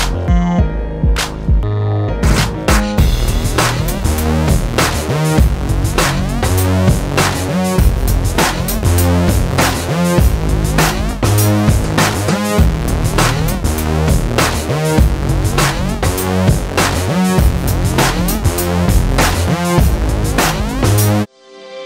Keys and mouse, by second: 0.5 ctrl+b, 1.3 ctrl+KP_Subtract, 2.3 alt+s, 2.8 ctrl+b, 4.0 ctrl+KP_Subtract, 4.6 alt+s, 6.1 ctrl+b, 7.7 Tab, 8.7 middle click, 9.4 Tab, 9.9-10.5 ctrl+z, 10.8 ctrl+z, 11.0 ctrl+b, 11.9 ctrl+z, 12.1 ctrl+b, 12.7 ctrl+KP_Subtract, 12.9 alt+s, 13.5 ctrl+b, 14.2 ctrl+z, 14.5 ctrl+b, 15.8 ctrl+KP_Subtract, 16.4 alt+s, 17.3 ctrl+b, 18.0 Tab, 18.9 ctrl+s, 19.9 alt+h.